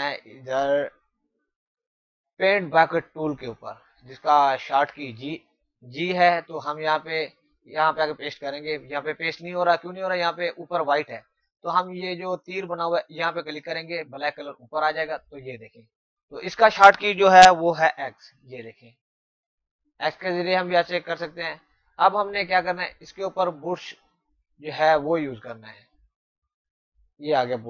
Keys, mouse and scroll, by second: 0.0 click, 8.6 click, 12.8 click, 18.3-18.6 typing, 26.8 click.